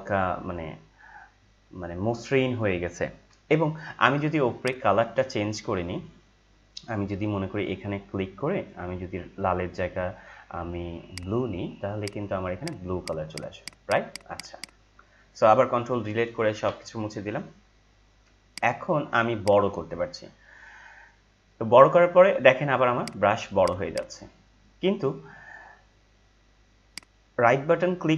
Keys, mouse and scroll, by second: 1.2 F4, 4.6 click, 11.0 click, 16.5 ctrl+Delete, 18.4 right click, 18.5 right click, 19.7-22.7 drag, 22.9 click, 26.8 right click.